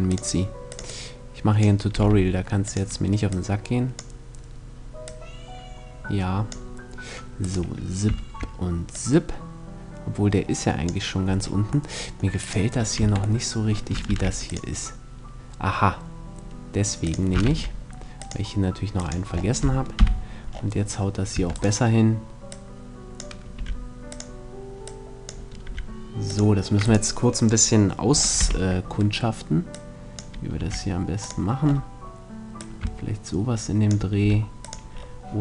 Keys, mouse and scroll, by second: 1.6 r, 2.3-6.4 drag, 7.2-8.8 right drag, 8.5-10.3 drag, 11.5 middle click, 12.1-13.6 right drag, 12.7 Tab, 13.7 ctrl+r, 16.9 click, 17.1 ctrl+r, 19.6 KP_3, 21.0 Tab, 21.3 right click, 23.2 r, 25.3 r, 25.3-28.3 drag, 26.6-28.3 right drag, 28.0 z, 28.3 middle click, 29.3-33.9 drag, 30.2 r, 33.9 r, 34.4-35.4 drag.